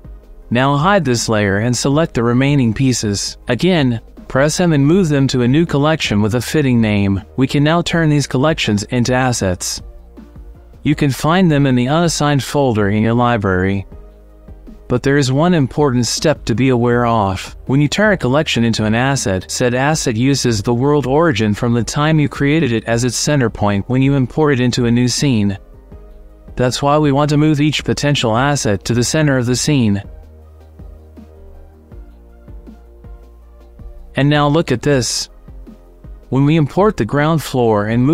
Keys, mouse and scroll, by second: 1.5 click, 2.5 click, 3.2 m, 5.2 o, 8.8 click, 10.8-12.5 drag, 12.9-13.5 drag, 14.3 click, 18.0 click, 20.4-21.8 drag, 23.2 g, 26.9-27.3 drag, 27.8 ;, 28.2 shift+middle click, 28.9 g, 31.9 g, 33.5-33.9 drag, 35.7 click.